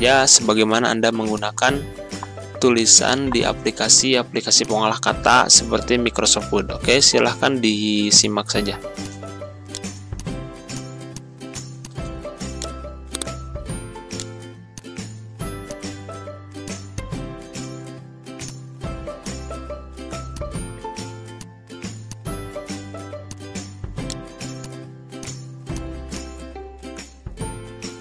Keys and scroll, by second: 3.5 c, 13.6 ctrl+a, 17.4 2, 17.5 6, 17.7 Return, 27.5 ctrl+z.